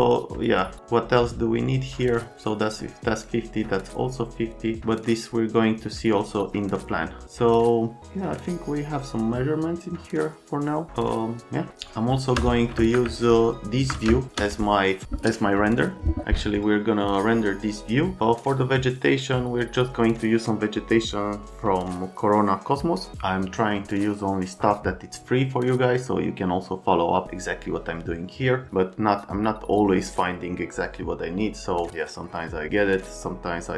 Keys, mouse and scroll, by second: 11.7 space, 11.9 click, 12.8 space, 13.4 ctrl+alt+click, 14.0 space.